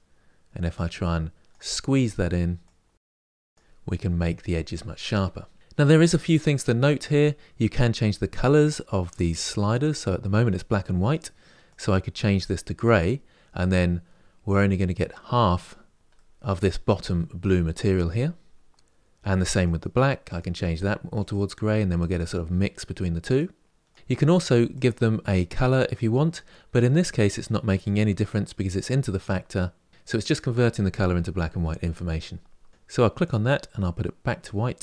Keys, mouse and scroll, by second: 3.4-12.5 drag, 19.4 click, 20.9 click, 23.1-25.3 drag, 32.7 click, 34.1 click.